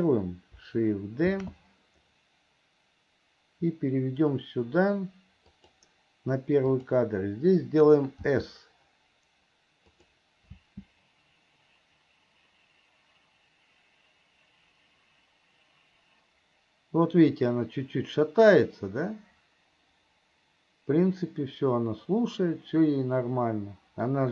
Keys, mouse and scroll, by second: 7.0 click.